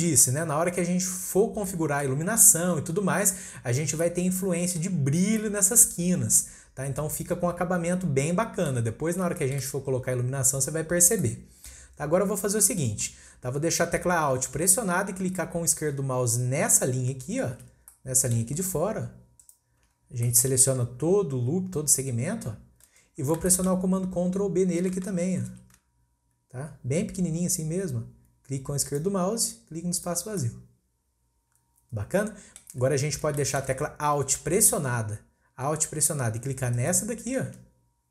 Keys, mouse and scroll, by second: 1.1-1.7 scroll down 1, 1.7-5.1 middle drag, 5.1-5.4 scroll down 1, 5.4-8.4 middle drag, 9.0-9.3 scroll up 1, 9.3 shift+middle drag, 9.5-11.2 scroll up 2, 11.2-12.0 middle drag, 12.0-13.9 scroll up 1, 13.9-14.9 scroll up 1, 17.8 scroll down 2, 17.9-18.3 middle drag, 18.3-19.2 scroll up 1, 19.2 scroll up 1, 19.4 alt+click, 20.0 scroll down 1, 20.3-23.0 middle drag, 23.0-23.5 scroll up 1, 23.5 shift+middle click, 23.9-24.4 scroll up 1, 24.4-25.5 scroll down 1, 25.5 ctrl+b, 29.3-30.0 scroll down 2, 30.0 click, 30.4-32.9 middle drag, 32.9-33.4 scroll up 1, 33.4-35.0 shift+middle drag, 35.0-36.7 scroll up 1, 36.7 alt+click, 37.8-38.1 scroll down 2.